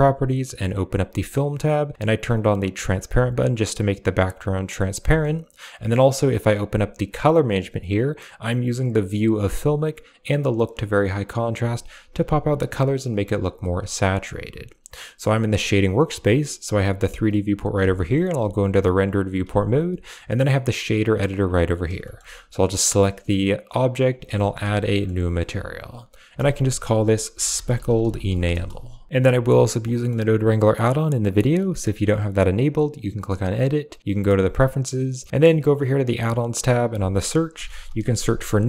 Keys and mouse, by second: 0.6 click, 2.7 click, 3.5 click, 3.9 click, 4.3 click, 5.8 click, 6.5-7.0 drag, 8.7 click, 10.0 click, 15.4 click, 16.5 right click, 17.7 z, 18.8 click, 19.3 z, 20.8 click, 21.9 shift+middle click, 23.8 click, 24.3 shift+middle click, 24.8 middle click, 25.6 click, 26.2-29.1 drag, 29.1 a, 29.8 middle click, 33.0-34.0 drag.